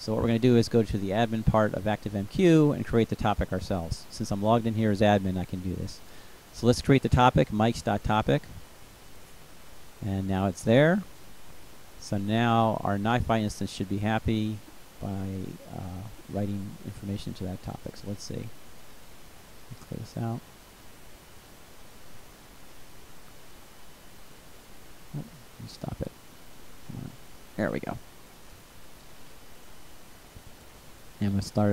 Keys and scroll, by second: 4.6-7.2 typing.